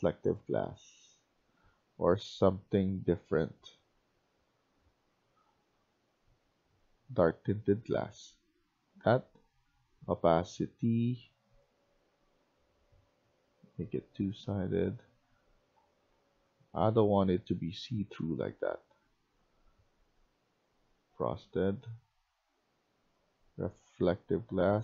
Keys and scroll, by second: 0.4-1.8 typing.